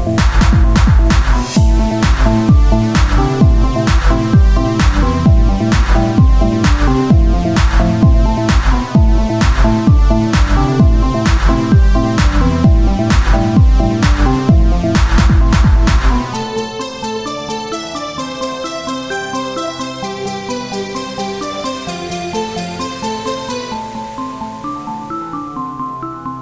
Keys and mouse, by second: 1.7 e, 3.8 click, 4.5 e, 6.6 click, 7.1 e, 9.1 click, 10.4-12.5 middle drag, 12.5 ctrl+Tab, 13.8-17.8 drag, 16.5 right click, 20.3 ctrl+r, 21.3-22.6 drag, 22.4-23.8 right drag, 23.6 Tab, 23.6 click, 24.0-26.4 drag.